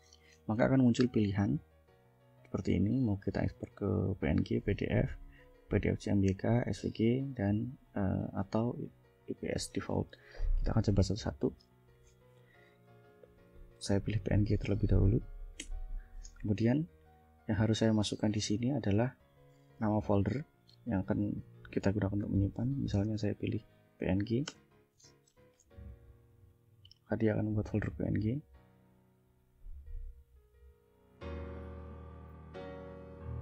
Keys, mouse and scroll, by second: 7.7 click, 8.8 click, 10.2 click, 13.8 1, 15.7 Return, 22.3-23.6 typing, 24.5 Return.